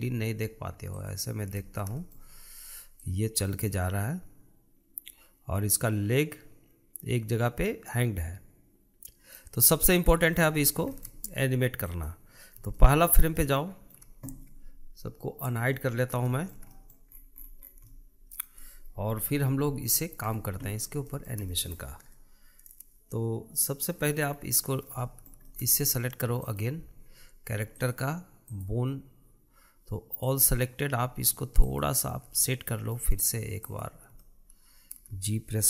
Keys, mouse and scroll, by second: 1.5 click, 2.2-3.7 shift+middle drag, 3.7-6.8 drag, 10.7-12.5 middle drag, 12.5-13.4 drag, 13.4-16.1 shift+middle drag, 16.1 click, 16.9-17.7 shift+middle drag, 17.7-18.5 scroll up 9, 18.5-19.7 shift+middle drag, 19.7 KP_Decimal, 20.5-21.6 scroll down 10, 21.6-24.6 shift+middle drag, 24.6-25.6 scroll up 4, 25.6-27.0 shift+middle drag, 27.0 click, 28.4-31.0 drag, 32.2 shift+click, 33.0-34.2 middle drag, 34.2 click, 34.8-35.6 shift+middle drag.